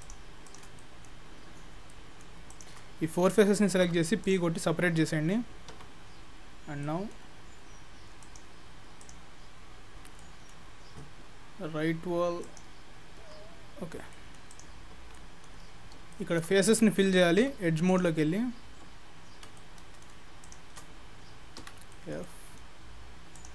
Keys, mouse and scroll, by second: 0.0 shift+click, 0.8 middle click, 1.3-1.9 scroll up 7, 1.9 middle click, 2.5 shift+click, 3.8 p, 4.7 scroll down 2, 5.0 scroll up 1, 5.7 Tab, 6.3-8.0 scroll down 8, 6.9 middle click, 8.3 click, 9.1 click, 9.6 scroll up 4, 10.2 middle click, 12.5 click, 13.6-14.0 scroll up 4, 14.0-14.6 scroll down 2, 14.2 middle click, 14.6 click, 15.0 Tab, 15.2 middle click, 15.7 scroll up 2, 16.2 shift+middle click, 17.5 2, 17.9 click, 19.6 middle click, 20.5 shift+click, 21.7 f, 22.0 middle click, 22.3 middle click, 23.4 click.